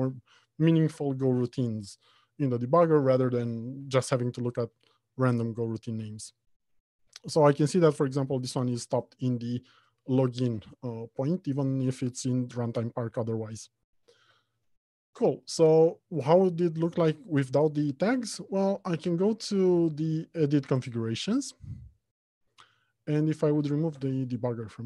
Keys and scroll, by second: 15.0 ctrl+alt+Left, 17.4 ctrl+F2.